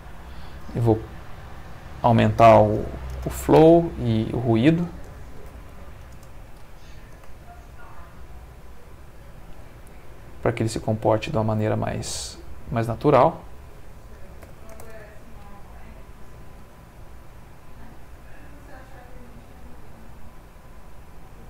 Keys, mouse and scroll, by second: 0.1 Escape, 1.7 click, 2.7 5, 3.1 Return, 4.4 click, 5.3 1, 5.4 0, 6.1 Return, 7.1 space, 11.1-12.1 middle drag, 12.7 Escape, 13.4 click, 14.2 1, 14.4 0, 14.7 Return, 14.9 space, 16.5 middle click, 21.2-21.4 middle drag.